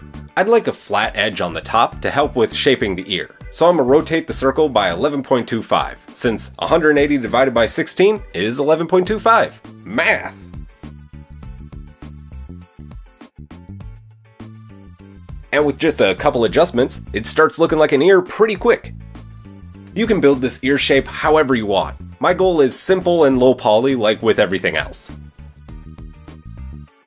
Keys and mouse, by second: 1.1 drag, 1.8-6.3 drag, 1.9 r, 15.4 s, 18.3-19.7 drag, 23.2-24.2 drag, 26.0 click, 26.6 shift+middle click, 26.8 shift+middle drag.